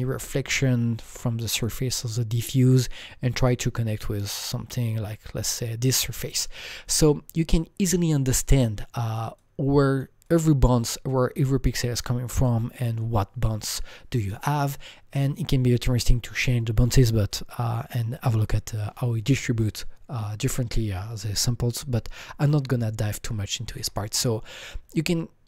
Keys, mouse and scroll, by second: 2.5 alt+middle click, 2.5 alt+right click, 2.5-4.6 scroll down 3, 4.6-6.7 scroll down 7, 7.0-8.5 alt+drag, 8.5 alt+double click, 9.4 alt+click, 10.6-15.1 alt+drag, 10.6-10.9 scroll down 1, 24.5-25.4 alt+drag, 24.5-24.9 scroll down 1, 24.9-25.4 right drag.